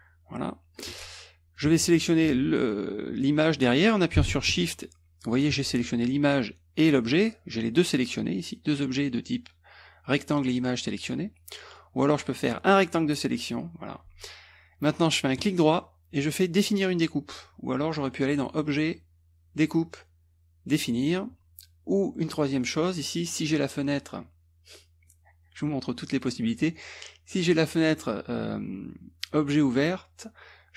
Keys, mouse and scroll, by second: 1.6 click, 4.6 shift+click, 11.7 click, 12.4-13.8 drag, 15.4 right click, 17.9 click, 18.4 click, 22.5 click, 25.1-26.4 drag.